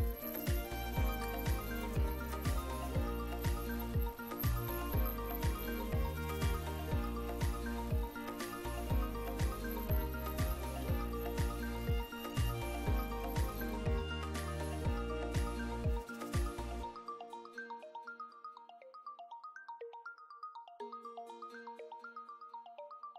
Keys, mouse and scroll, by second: 1.3 click, 2.7 click, 3.8 click, 5.7-6.1 drag, 7.2-8.9 drag, 9.6-10.1 drag, 10.8 ctrl+d, 11.3-12.4 ctrl+drag, 12.7 ctrl+d, 13.0-13.7 ctrl+drag, 13.7 ctrl+click, 13.9 ctrl+d, 13.9-14.3 ctrl+drag, 14.3 ctrl+d, 14.4 ctrl+click, 14.9 click, 15.4 click, 16.1-16.7 drag, 16.9 click, 17.3 click, 17.7 click, 18.3 click, 19.0 click, 19.4 click, 19.8 click, 20.4 click, 21.1 click, 21.5 click, 21.8 click, 22.6 click.